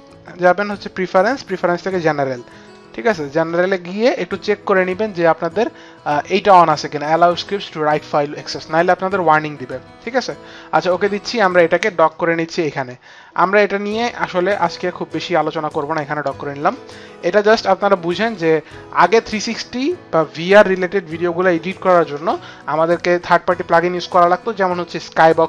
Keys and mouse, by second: 1.0 click, 10.0 click, 10.8 click, 12.1 click, 17.5 click.